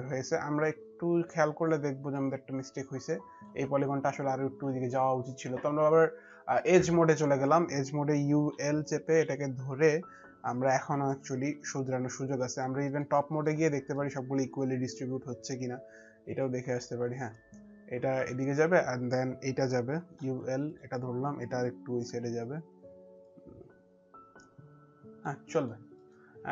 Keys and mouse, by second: 1.8 alt+click, 6.4 click, 8.0-8.7 typing, 10.3-11.1 typing, 10.5 click, 11.6 click, 13.1 middle click, 13.8 middle click, 16.8 click, 17.9 click, 19.5-20.5 typing, 20.4 click, 21.8 e, 23.0 click, 25.2 middle click, 26.0 middle click, 26.0 click.